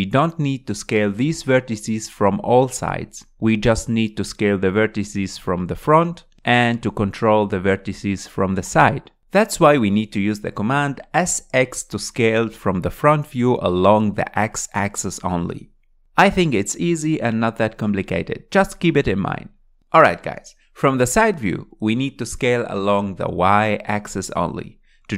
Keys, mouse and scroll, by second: 0.5 s, 4.4 click, 5.4 s, 7.6 click, 8.4 s, 8.6 s, 10.6-11.9 shift+middle drag, 11.9 click, 12.8 s, 14.9 shift+middle click, 15.7 scroll down 4, 15.9-18.1 middle drag, 18.1 KP_1, 19.4 scroll up 3, 20.3 click, 20.9 click, 21.1-22.6 shift+middle drag, 22.6 s.